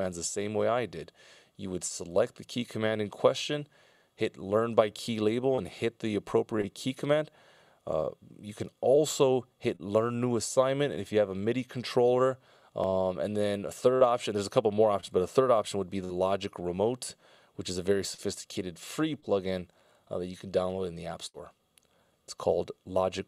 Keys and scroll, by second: 19.6 Down.